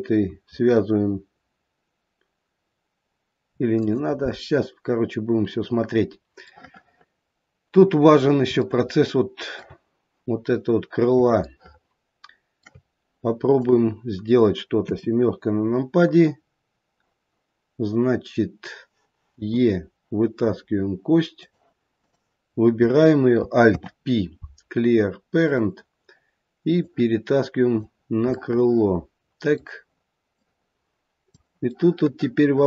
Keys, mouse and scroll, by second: 3.7 click, 4.8-5.4 scroll down 1, 5.4-6.5 scroll down 1, 6.5 middle click, 8.6 shift+middle click, 13.6 click, 14.8 KP_7, 16.0-16.7 scroll up 2, 21.9 click, 21.9 e, 23.6 alt+p, 26.7 click, 28.5 middle click, 28.6 middle click, 30.3 click, 31.7 middle click.